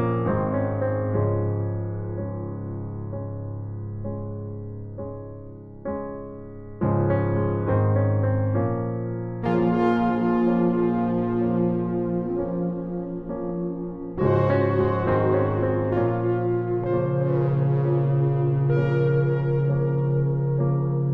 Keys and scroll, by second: 2.5 ctrl+t, 12.5 alt+shift+Return, 16.2 ctrl+alt+z.